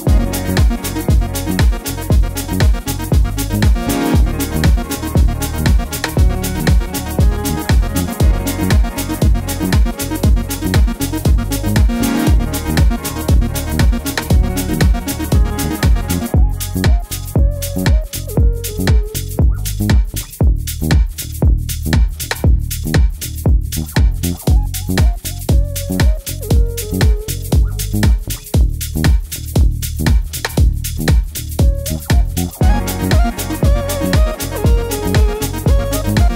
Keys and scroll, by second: 16.1 Right, 16.3 Right, 16.5 Down, 17.0 Left, 17.3 Left, 17.5 Up, 25.9 super+d, 26.2 Left, 26.4 Left, 26.5 Left.